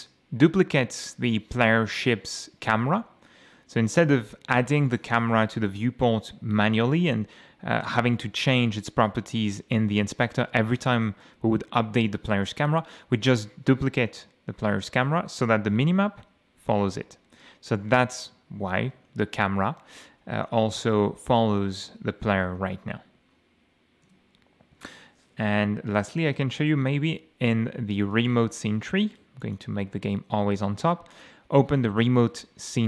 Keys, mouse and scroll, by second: 4.2 scroll down 2, 4.9 click, 5.6 click, 14.7 F6, 16.1 m, 17.2 w, 17.9 a, 19.1 d, 19.7 a, 20.5 d, 22.5 m, 24.1 F8, 26.3 F6, 28.1 right click, 29.4 click, 31.1 click.